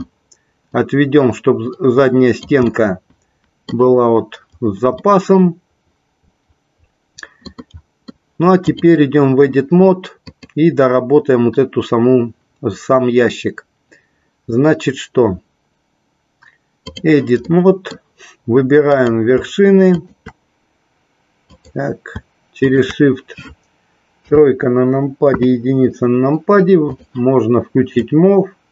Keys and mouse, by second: 0.9-2.6 drag, 2.9-4.1 middle drag, 5.2-8.3 middle drag, 8.8 click, 10.6-17.3 drag, 17.7 middle click, 19.1 click, 20.1 shift+click, 21.7 click, 24.3 KP_3, 25.4 KP_1, 28.2-28.7 drag.